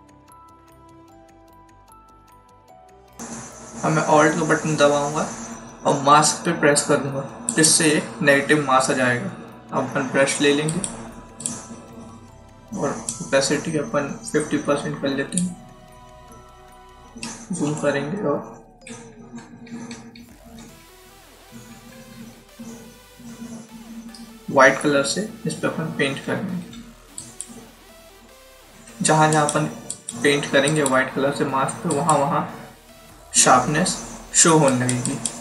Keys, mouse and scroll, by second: 2.0 click, 7.4 click, 10.6 click, 17.2-17.6 scroll up 2, 18.8-21.2 typing, 24.7 typing, 26.0-26.7 typing, 27.1 click, 28.6 [, 28.9 [, 29.3 click, 34.6 click.